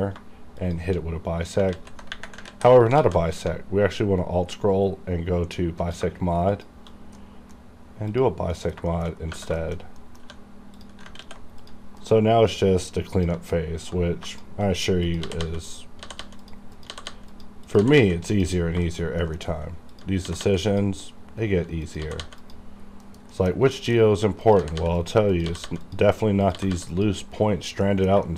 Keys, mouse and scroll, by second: 0.6 shift+click, 1.7 ctrl+z, 2.5 ctrl+z, 3.0 alt+x, 3.8-5.0 alt+scroll down 2, 5.0-5.7 alt+scroll down 1, 5.7 alt+scroll down 1, 6.5 shift+click, 7.2 middle click, 8.1 click, 8.5 middle click, 8.9 shift+middle click, 9.1 shift+scroll up 2, 9.6 shift+middle click, 9.8 shift+scroll up 1, 10.0 middle click, 10.2 1, 10.3 scroll up 1, 10.7 click, 11.2 ctrl+x, 11.6 click, 12.0 KP_Decimal, 12.4-13.1 scroll up 1, 13.2 click, 14.3 shift+click, 14.3 shift+click, 15.1 click, 15.3-17.9 typing, 15.7 click, 16.4 click, 17.3 click, 18.3 click, 18.6 scroll down 1, 18.8 shift+scroll up 1, 19.1 shift+middle click, 19.2 middle click, 19.4-19.9 scroll up 1, 19.9 click, 20.2 g, 20.4 g, 20.7 click, 22.0 g, 22.4 click, 22.7 scroll down 1, 23.0 KP_Decimal, 23.3 middle click, 23.6-24.5 scroll up 3, 23.8 shift+middle click, 24.5 click, 24.6-26.7 typing, 25.0 click, 25.9 click, 26.9 click, 27.3-27.9 scroll down 1, 27.9 middle click, 28.3 shift+middle click.